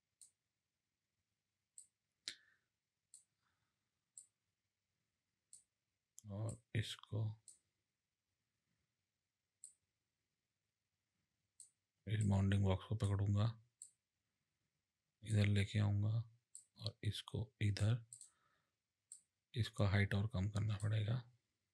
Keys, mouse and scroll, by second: 4.2 click, 6.5 click, 12.2 click, 13.8 click, 16.5 click, 18.1 click, 19.1 click.